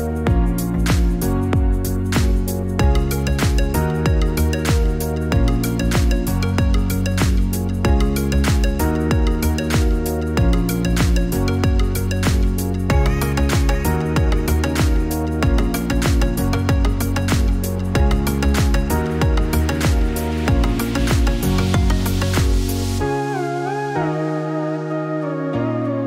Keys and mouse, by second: 9.9 click, 13.5-19.8 drag, 23.9-26.0 drag.